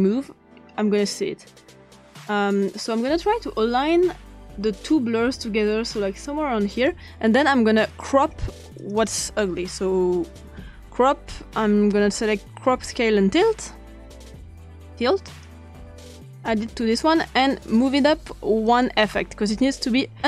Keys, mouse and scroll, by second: 0.0-6.9 drag, 7.9 click, 8.8 click, 10.0-10.6 typing, 13.4-15.4 drag, 16.3 click, 18.7 click.